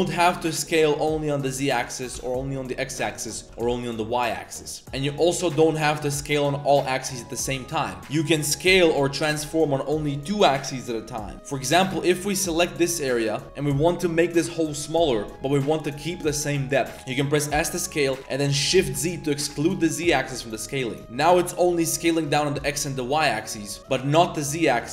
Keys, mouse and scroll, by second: 1.7 click, 2.1 s, 3.2 click, 3.4 s, 4.8 s, 4.9 click, 5.3 click, 5.7 s, 8.1-8.5 drag, 11.3 click, 11.7 click, 12.0 s, 12.9-13.4 drag, 13.4 z, 15.3 z, 15.4-16.1 drag, 16.8 z, 16.9 z, 17.5 s, 21.0 click, 21.0 s, 24.7 click.